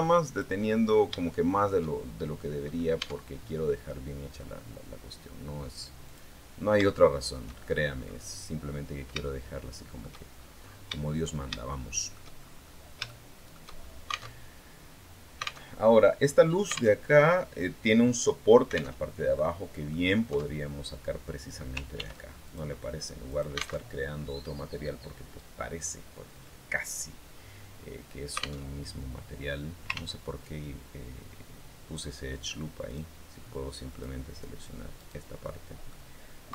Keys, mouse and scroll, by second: 0.4-0.8 scroll down 2, 1.0 shift+middle click, 1.9-2.4 shift+scroll down 1, 2.4 scroll up 1, 2.8 Tab, 3.2-3.5 scroll down 1, 5.8 click, 6.3-6.6 scroll down 1, 6.6 shift+middle click, 7.4-7.8 shift+scroll up 1, 7.8 scroll down 1, 9.0 shift+middle click, 10.1 shift+scroll up 3, 10.4-10.7 scroll down 3, 11.5 shift+middle click, 12.5-12.8 scroll up 3, 12.8 shift+middle click, 14.1 alt+Tab, 15.4 alt+Tab, 16.7 alt+Tab, 18.8 alt+Tab, 19.2 alt+click, 20.1 Tab, 21.8 ctrl+r, 22.2 ctrl+click, 23.1 alt+click, 23.6 alt+Tab, 28.4 alt+Tab, 29.7 ctrl+z, 32.7 click, 33.7 click, 34.8 right click, 35.2 middle click, 36.3 KP_3.